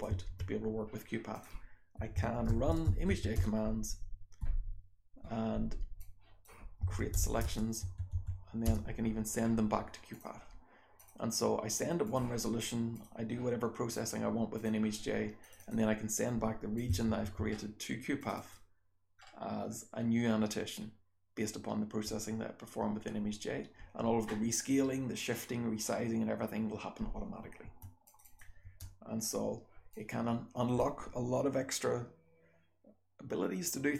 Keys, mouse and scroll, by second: 14.5 click, 15.4 click, 15.6 click, 16.7 click, 17.0 f, 17.6-18.1 scroll up 1, 18.1 click, 18.1-19.4 scroll up 1, 18.3 click, 19.4 scroll up 1, 19.7-21.3 scroll down 1, 21.3-24.7 scroll down 1, 24.7-27.7 scroll down 1, 27.7-29.9 scroll down 2, 27.7 BackSpace, 28.0 click, 28.2 click, 28.6 BackSpace, 29.9-30.7 drag.